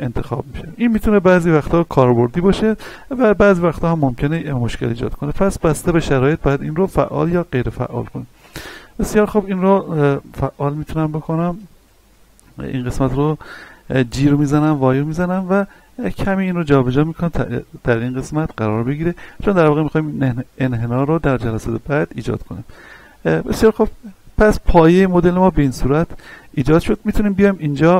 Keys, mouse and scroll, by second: 9.3 z, 9.7-10.0 scroll up 1, 10.2 shift+middle click, 12.2-12.7 scroll down 1, 14.1 g, 14.6 y, 17.0 click, 18.1-18.6 scroll up 1, 18.8 shift+middle click, 19.3-21.1 scroll up 1, 22.2-23.2 scroll down 1, 23.5 Tab, 24.0 middle click, 25.2 scroll down 1, 25.5 z, 26.0 shift+middle click, 27.2 click.